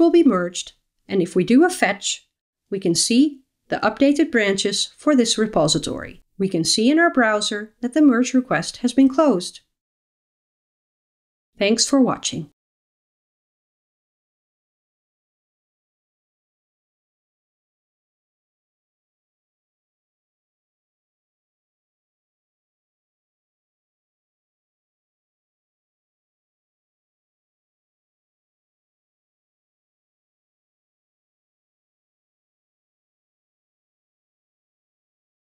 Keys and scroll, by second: 4.4 super+9, 5.9 super+9.